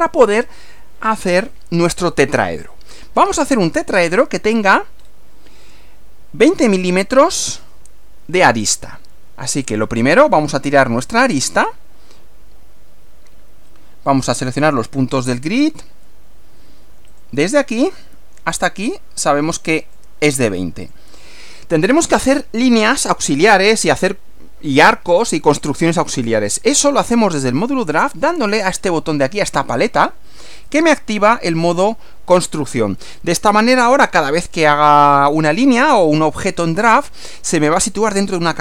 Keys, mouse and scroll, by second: 4.1 scroll up 1, 5.0 scroll up 2, 10.7 click, 14.4 click, 17.1 click, 19.8 click, 20.9 click, 30.7 click.